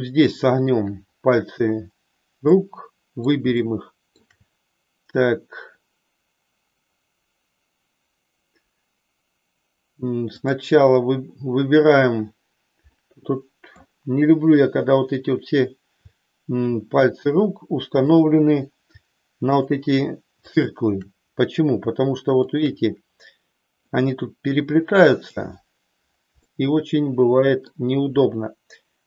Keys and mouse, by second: 0.1 shift+middle click, 2.5 middle click, 3.7 shift+middle click, 12.9-13.9 middle drag, 19.4-20.7 shift+drag, 23.9-25.3 middle drag, 26.4-27.7 middle drag.